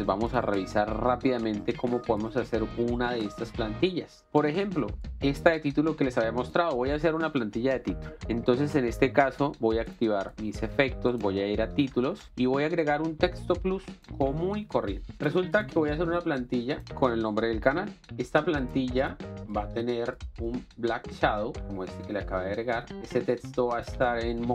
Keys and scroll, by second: 6.0 ctrl+x, 17.8-19.3 typing.